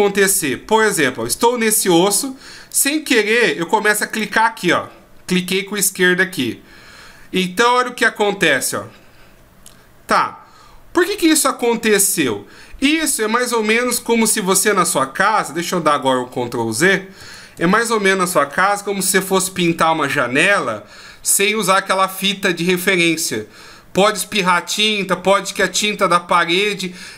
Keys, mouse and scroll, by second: 0.1 scroll down 1, 0.1 shift+scroll up 3, 2.7 click, 3.1 click, 4.1 click, 5.7 click, 7.9 r, 16.8 ctrl+z, 17.2 ctrl+z, 17.5 ctrl+z.